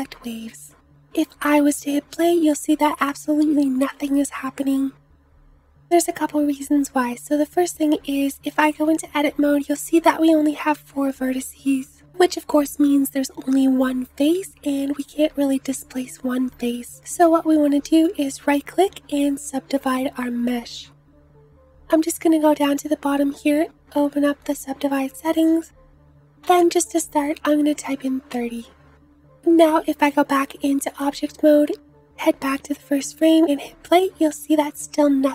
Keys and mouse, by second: 1.7 space, 3.1 space, 6.0-10.8 middle drag, 8.6 Tab, 12.4-19.9 middle drag, 29.7 Tab, 32.1 space, 32.8 space, 34.9 space.